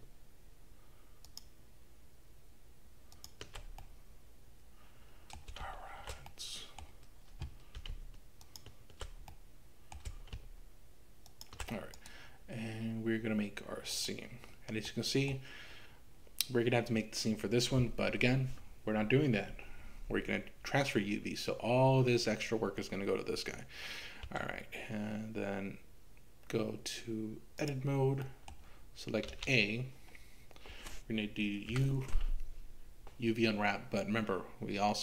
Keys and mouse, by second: 1.2 ctrl+shift+click, 3.1 ctrl+shift+click, 3.8-5.5 middle drag, 6.4 middle click, 8.4 ctrl+shift+click, 9.5 middle click, 12.1-14.2 right drag, 14.8 middle click, 24.3 Tab, 28.2 middle click, 29.3 a, 31.7 u.